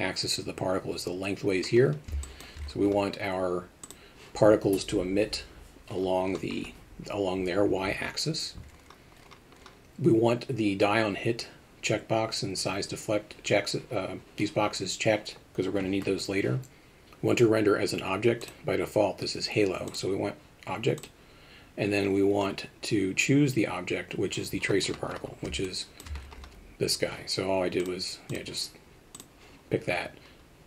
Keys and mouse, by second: 2.3 alt+shift+middle drag, 18.5-19.8 drag, 19.9 drag, 21.0 click, 25.7-26.0 alt+shift+middle drag.